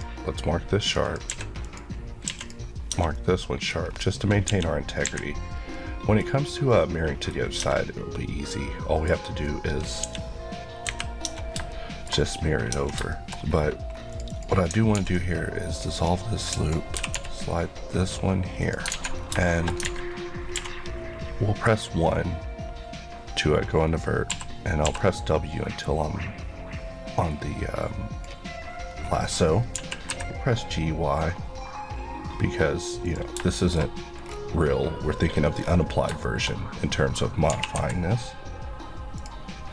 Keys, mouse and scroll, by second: 1.0 click, 1.1 Left, 1.3 q, 1.6 click, 2.3 q, 2.4 click, 2.9 Tab, 3.1 middle click, 3.9-4.4 scroll down 1, 4.5 KP_1, 5.0 KP_3, 5.7 middle click, 6.4 scroll down 1, 6.7 middle click, 7.6 Tab, 7.9-8.5 scroll down 1, 8.5 middle click, 9.2-9.7 scroll up 1, 10.0 KP_1, 10.8 KP_3, 11.2 Tab, 11.7 middle click, 12.7 Tab, 13.1 middle click, 13.4 scroll up 1, 14.1 click, 14.9 ctrl+x, 15.8 click, 16.9 typing, 18.6 click, 18.9 alt+z, 19.2 scroll down 1, 19.5 middle click, 19.9 alt+a, 24.3-24.8 typing, 25.8 click, 28.9 scroll, 28.9-29.7 scroll up 1, 29.7 g, 33.1 click, 33.5 shift+middle click, 34.3-35.6 scroll down 1, 35.6-37.5 scroll up 4, 36.2 shift+middle click, 37.5 g, 39.2 click.